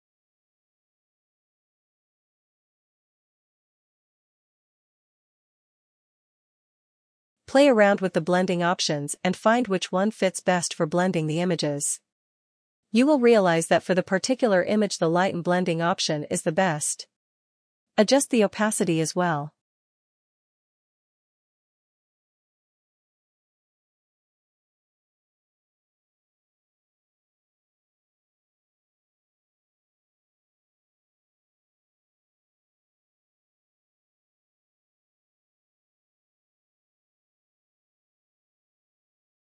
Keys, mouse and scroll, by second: 4.6 click, 6.3 click, 7.9 click, 10.4 click, 12.7 click, 14.2 click, 20.9 click, 29.5 click, 30.5 click, 32.7 click, 35.9 click.